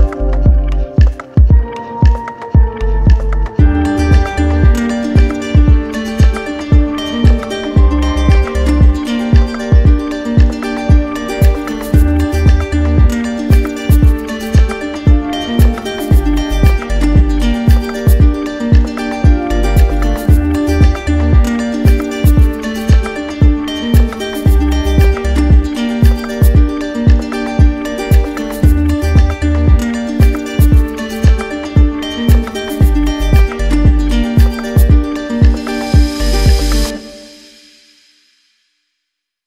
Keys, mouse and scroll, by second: 0.2 right click, 3.4 d, 4.6 click, 6.7 click, 7.3 ctrl+d, 8.5 alt+click, 9.3 shift+click, 10.5 shift+click, 10.8 shift+click, 11.6 shift+click, 12.2 click, 13.0 shift+click, 13.5 click, 14.2 shift+click, 15.2 alt+click, 16.1 alt+click, 17.5 d, 17.8 d, 18.4 d, 19.1 d, 20.6 alt+click, 22.1-23.4 typing, 24.2 click, 25.8 alt+click, 26.7 alt+click, 27.5 alt+click, 28.5 alt+click, 30.3 shift+click, 31.1 ctrl+z, 31.8 shift+click, 32.4 shift+click, 33.9 click, 34.4 click, 35.1 shift+click, 36.2 d, 37.1 click, 38.8 ctrl+d.